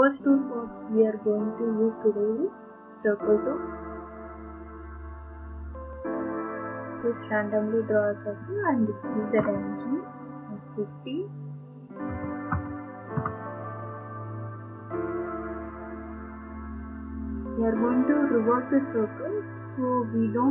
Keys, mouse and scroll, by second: 5.3 click, 6.9 click, 9.4 Escape, 10.7 click, 10.9 click, 12.1-12.5 typing, 13.1 Return, 14.3-14.8 typing, 14.7 scroll, 14.8 scroll up 1, 14.8-15.4 scroll, 15.4-16.8 scroll, 18.3 scroll down 10.